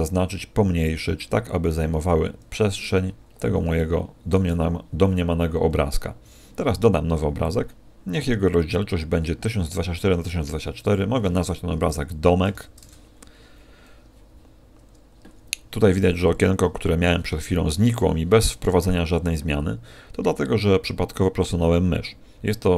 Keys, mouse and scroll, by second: 2.7 click, 3.1-3.7 scroll up 1, 3.7 shift+middle click, 3.7-4.3 scroll up 3, 4.6-5.3 scroll up 1, 7.3 click.